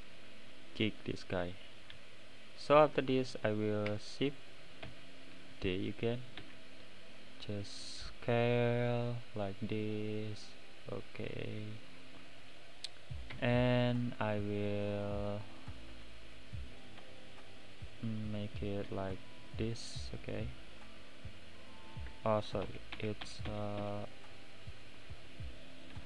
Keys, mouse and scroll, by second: 0.5-1.0 right drag, 0.5 middle click, 1.0 click, 1.5-1.9 middle drag, 2.9 click, 4.8 shift+d, 6.4 s, 11.8 right click, 11.8 middle click, 12.4-12.7 scroll up 2, 13.4 Tab, 13.8-15.1 middle drag, 15.1 click, 15.9 x, 18.1 click, 19.1 x, 20.3-22.6 middle drag, 22.6 ctrl+z, 22.9 ctrl+z, 23.3 ctrl+z, 23.5 ctrl+z, 23.8 ctrl+z, 24.4-24.9 middle drag, 24.9 click, 25.2-25.9 middle drag, 25.9 x.